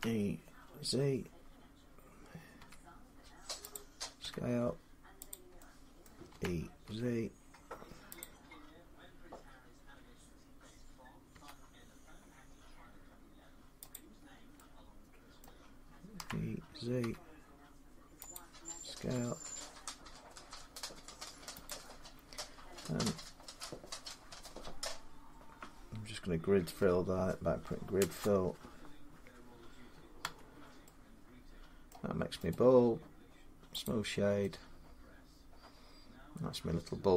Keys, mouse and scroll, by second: 2.4 z, 3.6-4.9 drag, 4.1 s, 5.9 middle click, 6.2-6.7 typing, 8.0 click, 11.1 s, 11.3-13.1 drag, 11.3 z, 13.6 s, 13.8 click, 14.1 scroll down 4, 15.2 middle click, 16.0-16.8 typing, 17.0 scroll up 4, 18.2 click, 18.9 s, 21.5 click, 23.3-26.5 drag, 26.6 F3, 27.8 Return, 30.0 Tab, 31.7 middle click, 32.3 right click, 33.7 click.